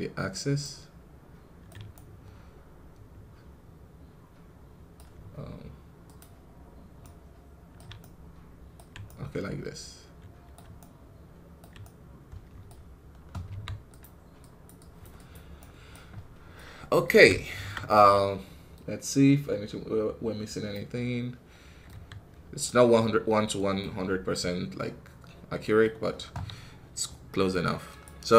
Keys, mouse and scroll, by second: 0.5-4.9 right drag, 5.9 click, 6.9-13.4 right drag, 13.4 f, 14.3-15.5 drag, 15.5 right click, 16.0 scroll down 1, 16.4-21.8 middle drag, 21.8 KP_1, 22.5-25.7 middle drag, 25.7-28.3 scroll down 1.